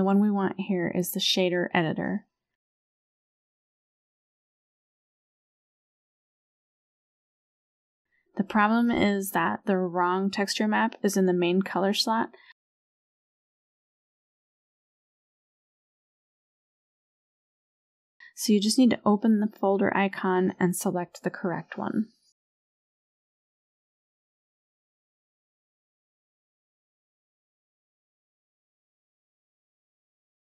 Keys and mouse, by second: 4.0 click, 5.6 click, 6.9 click, 7.5 click, 9.5 click, 13.5 middle click, 14.1 n, 14.5 n, 15.0 n, 15.8 middle click, 18.2 click, 24.0-24.4 shift+middle drag, 25.8-26.4 shift+middle drag, 30.4 click.